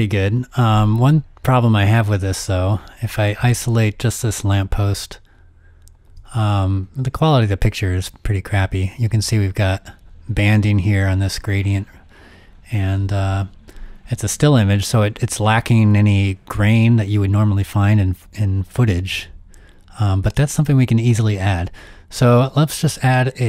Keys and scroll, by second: 6.2 z, 19.0 z.